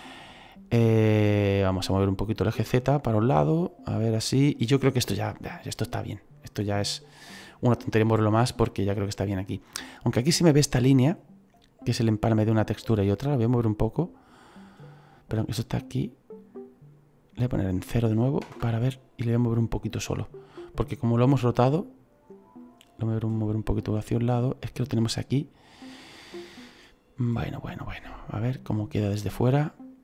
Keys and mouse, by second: 1.6 click, 5.6 right click, 11.0 right click, 12.7 click, 15.6 click, 17.6 click, 18.4 KP_0, 18.6 Return, 18.6 KP_Enter, 22.5 click, 26.6 right click, 28.0 middle click.